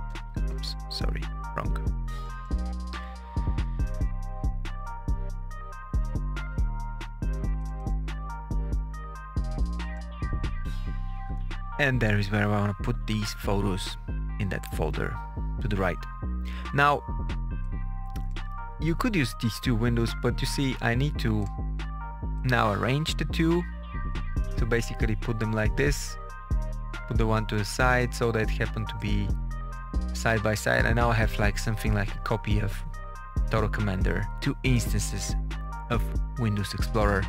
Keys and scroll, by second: 0.5 BackSpace.